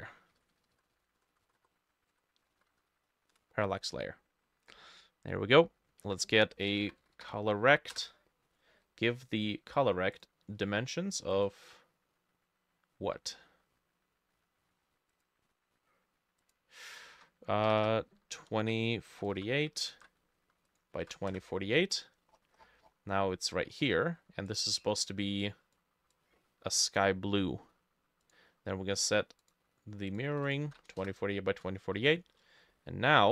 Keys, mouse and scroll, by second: 0.1-3.3 typing, 3.4 Return, 6.5-7.8 typing, 8.0 Return, 17.7 BackSpace, 17.8 BackSpace, 18.5 2, 19.1 4, 19.9 ctrl+c, 21.3 ctrl+v, 21.3 Return, 22.4-23.2 scroll down 14, 23.2 middle click, 23.7-24.5 scroll up 1, 27.3-29.3 middle drag, 30.4 ctrl+v, 30.7 ctrl+v, 31.1 Return, 31.6 middle click, 32.2 middle click, 32.8 middle click.